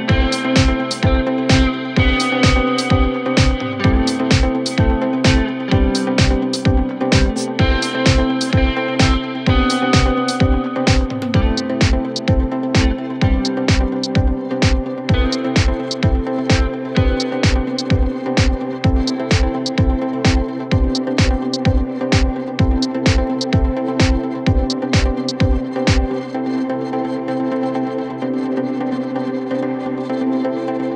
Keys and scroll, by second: 4.6 Escape, 10.1 4, 12.3 3, 12.8 ], 13.8 4, 16.4 2, 16.6 ], 17.8 4, 20.4 2, 26.9 f.